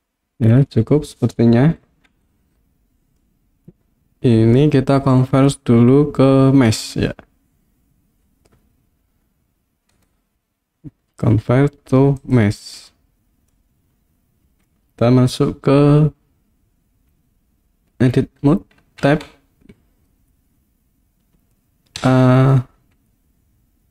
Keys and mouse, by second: 2.1 Tab, 3.2-4.6 middle drag, 6.7-8.3 right drag, 10.0-12.3 right drag, 13.5-14.7 middle drag, 19.1 Tab, 22.0 a.